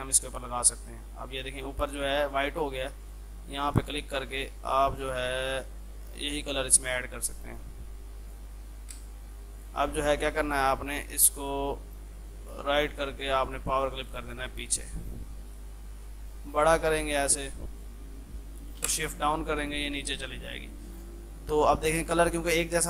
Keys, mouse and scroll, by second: 3.1 click, 8.3 click, 9.0 space, 9.6 click, 11.8 right click, 12.5 click, 15.1 F3, 15.5-18.8 drag, 18.8 shift+Page_Down, 19.6 ctrl+click, 20.1 F2.